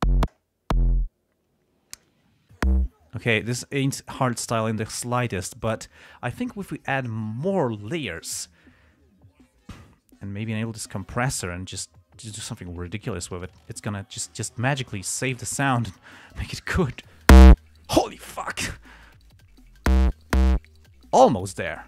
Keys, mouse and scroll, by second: 10.9 click, 12.3-13.0 drag, 13.3-14.0 drag, 14.6-16.9 drag, 17.2-19.8 drag.